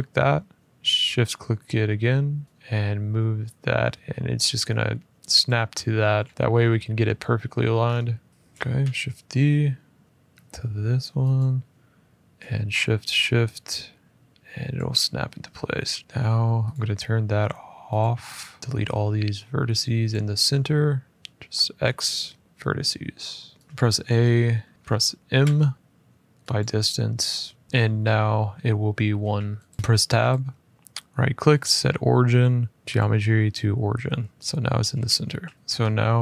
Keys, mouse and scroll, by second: 6.3-6.6 scroll up 2, 6.8 shift+middle click, 7.6 shift+scroll down 1, 8.7 ctrl+shift+d, 11.1 click, 12.5 shift+click, 16.4 click, 18.1 click, 19.8 shift+click, 21.6 x, 23.4 click, 23.6 scroll, 23.8 shift+middle click, 24.7 middle click, 25.2-25.6 scroll, 25.2 m, 26.5 click, 28.3 scroll, 29.0 Tab, 29.7 Escape, 29.8 Tab, 30.7 Tab, 30.7 right click, 33.0 click, 34.1 scroll, 35.1-36.1 shift+scroll, 36.1 scroll, 36.1 click.